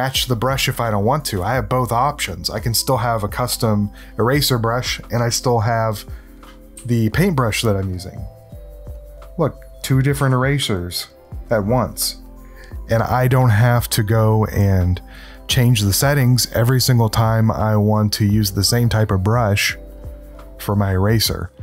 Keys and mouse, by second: 6.7 s, 7.9 click, 8.9-10.0 drag, 10.1 e, 10.3 click, 11.5 click.